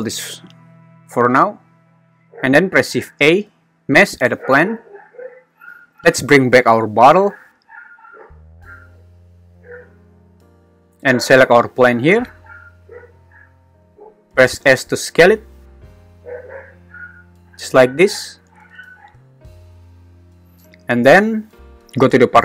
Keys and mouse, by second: 3.1 shift+a, 11.2 g, 11.9 Escape, 13.0 `, 14.8 s, 17.6 click, 21.7 Escape, 21.7 g.